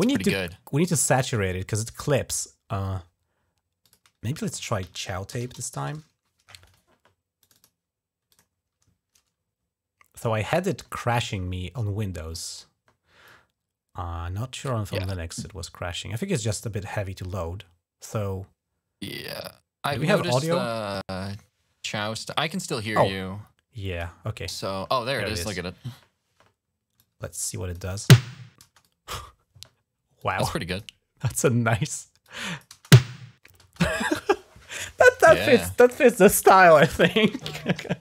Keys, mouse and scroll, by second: 0.2 right click, 3.6 click, 3.9 click, 4.9-6.0 typing, 7.2 click, 8.1 click, 13.1-14.4 drag, 22.6-23.8 drag, 26.8 click, 27.7 space, 28.4 space, 28.6 click, 30.0 click, 32.0 click, 32.5-33.4 typing.